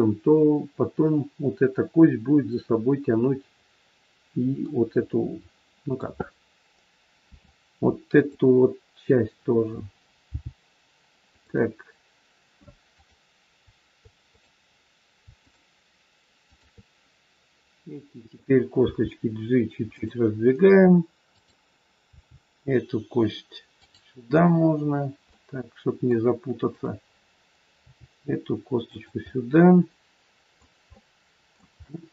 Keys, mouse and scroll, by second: 5.2 middle click, 7.2 r, 10.3 g, 12.9 click, 14.1 click, 15.3 shift+click, 15.6 shift+click, 18.9 g, 21.3 click, 22.0 g, 25.3 middle click, 26.7 click, 27.8 g, 29.1 middle click, 30.9 middle click.